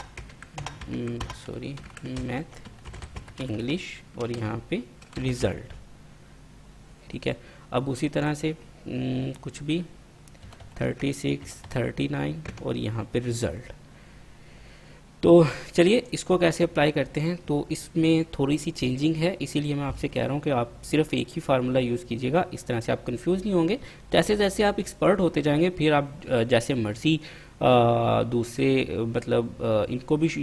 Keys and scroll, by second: 0.0-5.6 typing, 2.6 Tab, 3.8 Tab, 10.4-13.3 typing.